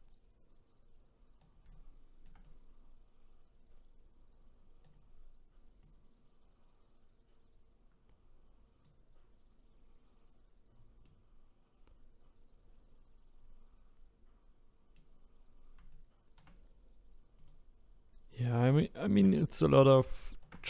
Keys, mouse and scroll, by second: 5.8-8.8 drag, 11.0-14.1 middle drag, 15.9-17.5 shift+right drag, 17.5 click, 18.1-18.8 scroll up 1, 18.8-20.6 shift+right drag.